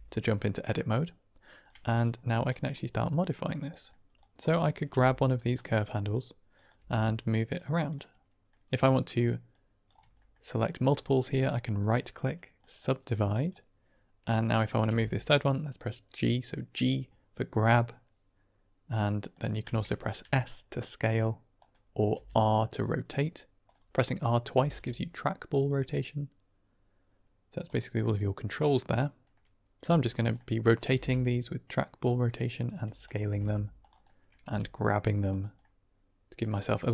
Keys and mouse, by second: 1.5 click, 2.5 click, 3.6 middle click, 4.5 click, 4.8 g, 5.3 click, 5.9 click, 6.4 click, 6.7 g, 7.4 click, 7.9 middle click, 8.7 click, 9.4 click, 10.1 shift+click, 10.5 click, 13.2 click, 14.8 g, 19.2 click, 20.1 s, 21.5 click, 22.0 r, 23.5 right click, 23.9 middle click, 24.4 r, 24.6 r, 27.5 right click, 27.9-29.2 middle drag, 29.7 s, 30.0 click, 30.4 middle click, 30.8 r, 30.9 r, 31.9 click, 32.7 s, 32.9 click, 33.2 r, 33.3 r, 33.7 click, 34.0 middle click, 34.3 g, 35.2 click, 35.6 middle click, 36.7 r.